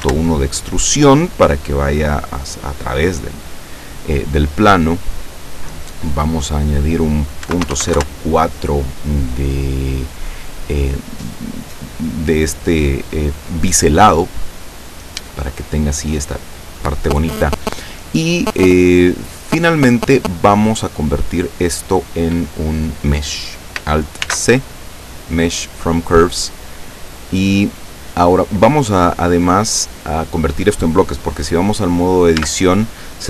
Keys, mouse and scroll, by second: 0.0-0.4 typing, 1.2-2.9 middle drag, 2.9-3.3 scroll up 1, 4.2 scroll down 1, 6.5 click, 7.2-8.4 typing, 14.8-15.4 scroll down 4, 17.8 scroll down 2, 18.3-19.9 middle drag, 24.3 alt+c, 25.2 click, 28.1 scroll down 1, 29.1 scroll up 1, 32.4 Tab.